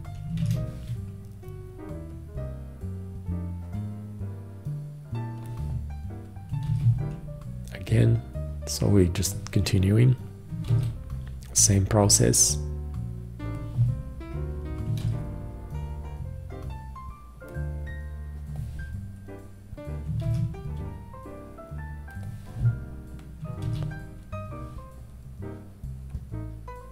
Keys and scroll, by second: 0.7 ctrl+`, 6.9 ctrl+`, 10.9 ctrl+`, 15.3 ctrl+`, 20.5 ctrl+`, 23.9 ctrl+`.